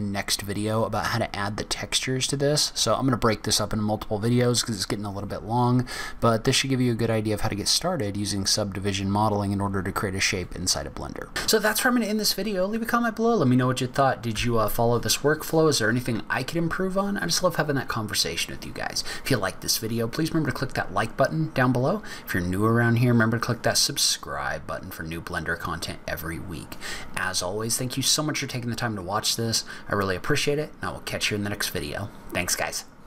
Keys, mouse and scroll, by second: 5.7-6.0 scroll down 4, 6.3 scroll up 1, 9.1 scroll down 2, 9.4-10.3 scroll up 2.